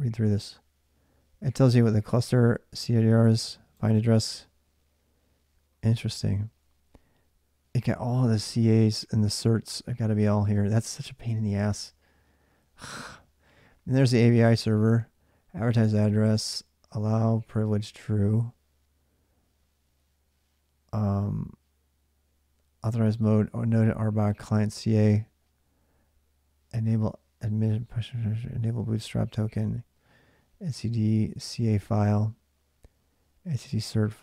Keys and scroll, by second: 10.2 space.